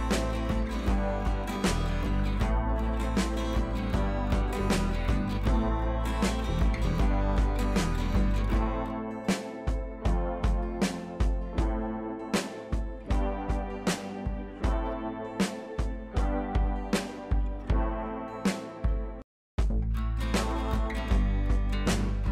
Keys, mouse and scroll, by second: 2.1 ctrl+j, 8.4 click, 11.4-11.7 drag, 16.0 click, 18.8 scroll down 1, 19.1 scroll up 1, 19.6 shift+click, 20.2 ctrl+g, 20.6 click.